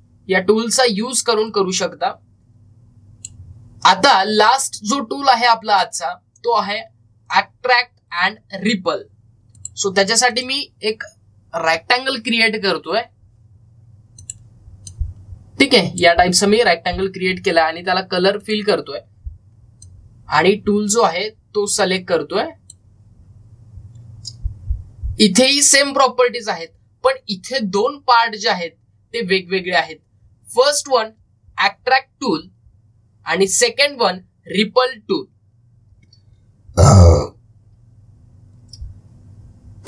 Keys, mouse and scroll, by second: 2.3-6.4 drag, 10.4 click, 15.0-19.2 drag, 19.2-26.0 drag.